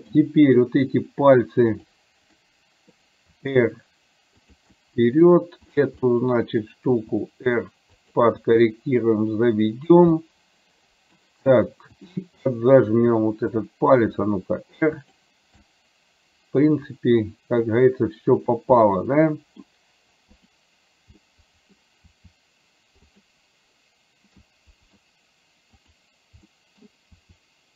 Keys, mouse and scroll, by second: 2.4 middle click, 3.5 r, 4.8 middle click, 5.8 click, 6.3 middle click, 7.4 r, 8.6 g, 10.3-11.3 middle drag, 12.1 click, 12.5-13.6 middle drag, 14.4 r, 15.8-17.8 middle drag, 18.4 click, 19.0 middle click, 20.4 click, 21.3 middle click, 22.3 r, 24.6 middle click, 26.0 click, 26.5 middle click, 27.6 r.